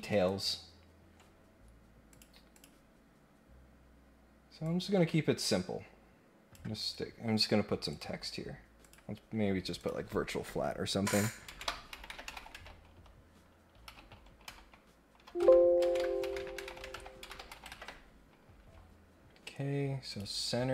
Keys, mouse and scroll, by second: 2.1 click, 2.5 click, 4.6-6.5 drag, 6.7 Escape, 7.9 click, 8.8 click, 9.7 click, 20.1 click.